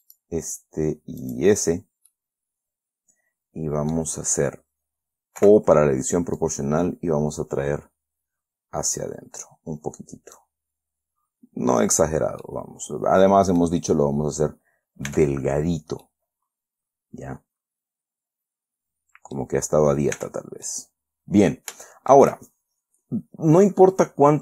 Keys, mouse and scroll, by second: 0.4 shift+middle click, 1.6 shift+middle click, 2.1-2.4 shift+scroll down 2, 2.4-4.5 middle drag, 4.6 scroll up 2, 5.7 o, 6.7-10.9 drag, 11.9 scroll down 1, 12.8-14.1 middle drag, 14.3-14.6 scroll up 2, 15.4 Tab, 15.9-16.4 scroll down 2, 16.4-19.9 middle drag, 20.0-20.3 scroll up 2, 20.5 Tab, 21.0-22.0 middle drag, 22.2 shift+middle click.